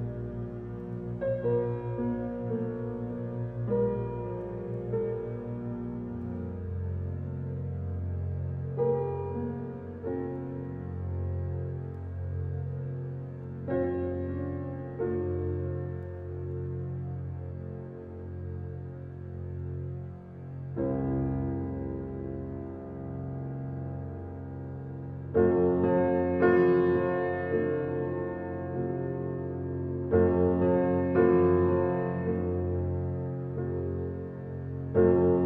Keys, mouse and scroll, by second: 0.2 middle click, 0.9 click, 1.8 click, 2.2 click, 3.4 click, 3.8 click, 5.4 click, 5.7 click, 7.3 click, 7.7 click, 9.2 drag, 9.8 click, 10.7 Tab, 11.0 scroll down 2, 11.3-13.1 middle drag, 13.5 alt+middle drag, 15.0 Tab, 16.0 alt+click, 16.6 middle click, 17.0-18.2 scroll up 1, 18.2-21.2 drag, 21.3 click, 22.7 drag, 23.1-24.2 drag, 24.2 alt+middle click, 24.7 alt+middle click, 25.4 shift+middle click, 25.9 alt+z, 26.4 click, 30.2 shift+click, 31.8 scroll up 4, 32.5 ctrl+click, 33.6 middle click, 34.2 scroll down 4, 35.2 click.